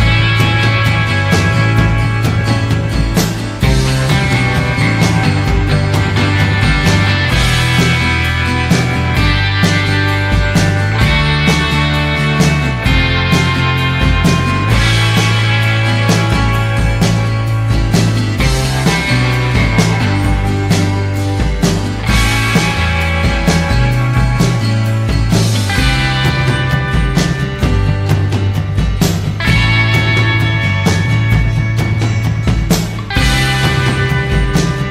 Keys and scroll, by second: 28.5 ctrl+z, 32.7 ctrl+z.